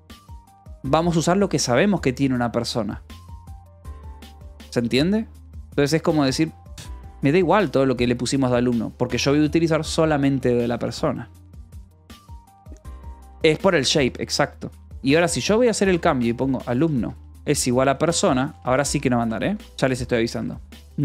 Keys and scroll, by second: 13.9-19.3 typing, 19.5 Escape, 20.8 k.